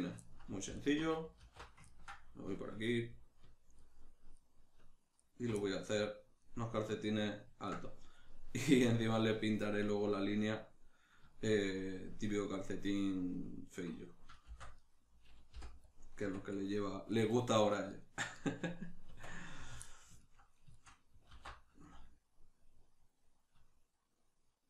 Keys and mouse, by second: 0.7 alt+right click, 1.4 alt+q, 1.8-3.7 ctrl+middle drag, 3.7 alt+shift+right click, 4.3 alt+shift+right click, 5.1 alt+shift+right click, 5.6-14.9 middle drag, 14.5 shift+d, 14.9 right click, 15.5 p, 16.2 Tab, 16.5 right click, 17.1 right click, 17.3 right click, 17.7 right click, 17.9 right click, 18.2 right click, 18.4 right click, 19.1 Tab, 19.8-24.6 middle drag, 21.3 alt+e.